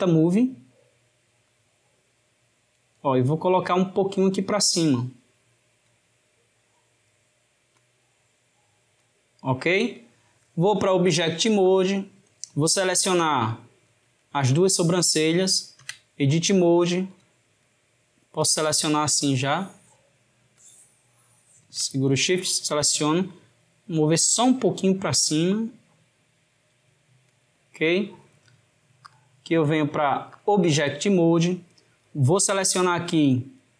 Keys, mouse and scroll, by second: 1.5 click, 7.9 click, 11.2-13.6 drag, 14.6 shift+click, 15.9 Tab, 17.1 click, 18.5 click, 20.7 shift+click, 23.9 click, 29.1-32.2 drag, 33.2 click.